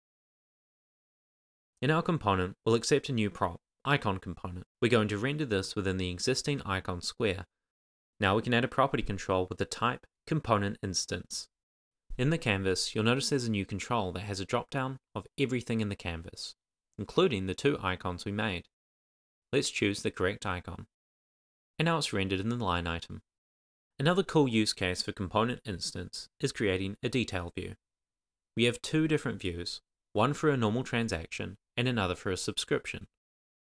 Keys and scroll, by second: 8.5-10.9 typing, 10.9 super+s.